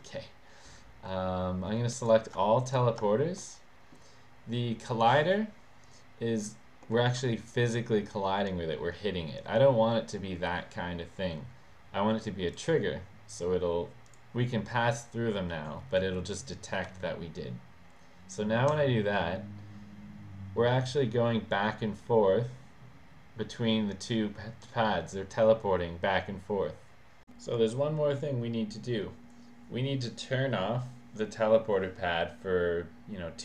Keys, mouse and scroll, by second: 2.1 click, 2.8 shift+click, 3.5 middle click, 7.0 middle click, 9.1 middle click, 12.6 click, 14.2 click, 16.9 w.